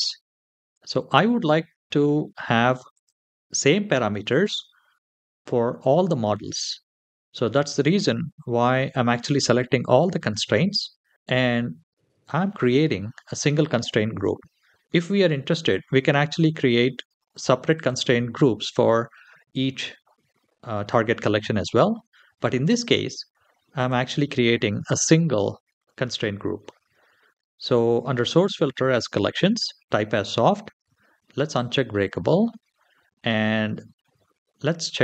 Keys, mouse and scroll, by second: 2.7 click, 3.4 click, 17.1 click, 17.5 click, 22.4 click, 23.6 click, 25.7-26.1 scroll down 2, 31.3 click.